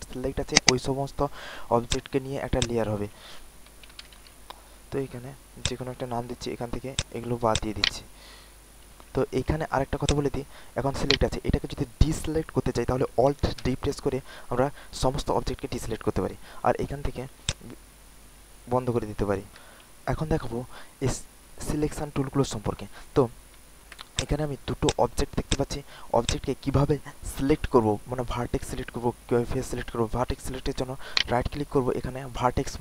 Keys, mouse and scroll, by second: 3.9-4.3 typing, 5.5 click, 7.5 alt+click, 7.7 alt+click, 10.0 click, 10.6 alt+middle click, 13.6 alt+d, 17.4 click, 24.1 click, 24.8 click, 25.4 alt+click, 25.8 alt+middle click, 26.2 click, 31.1-32.8 right drag.